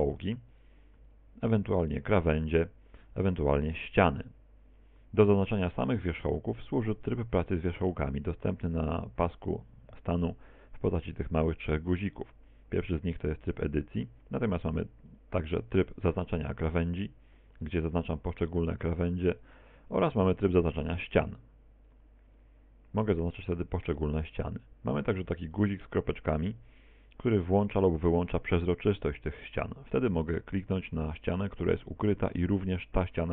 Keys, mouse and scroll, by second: 0.6 right click, 1.1 right click, 1.7 right click, 2.5 shift+right click, 3.5 shift+right click, 3.9 shift+right click, 5.9 right click, 6.7 right click, 7.1 right click, 7.9 right click, 15.1 click, 17.1 right click, 17.6 right click, 18.1 right click, 18.7 right click, 19.1 right click, 19.5 right click, 20.9 click, 21.9 right click, 22.4 right click, 23.1 right click, 23.6 right click, 24.3 right click, 27.9 click, 32.5 right click.